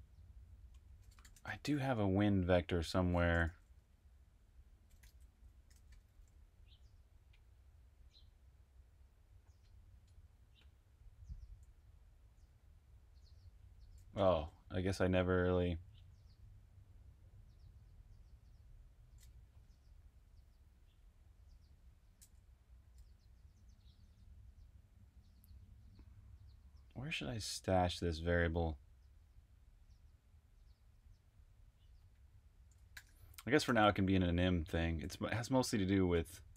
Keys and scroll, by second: 1.1-1.8 typing, 3.4 shift+super+f, 4.6-5.8 typing, 11.3-12.4 typing, 14.1 Return, 22.5-23.4 typing, 32.9-34.9 typing.